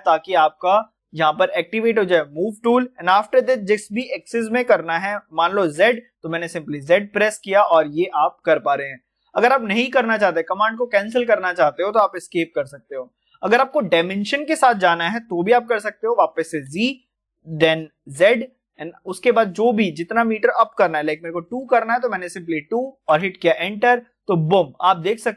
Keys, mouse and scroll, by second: 16.4 g, 17.9-18.6 typing.